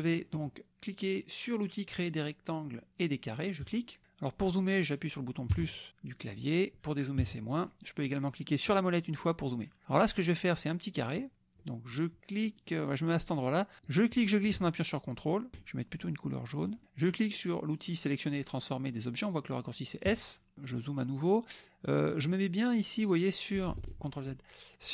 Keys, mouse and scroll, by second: 3.6 click, 5.5 KP_Add, 7.2 KP_Subtract, 8.6 click, 10.7 click, 12.4 click, 13.8-15.6 drag, 16.5 click, 20.1 click, 20.6 click, 21.9 click, 23.9 ctrl+z.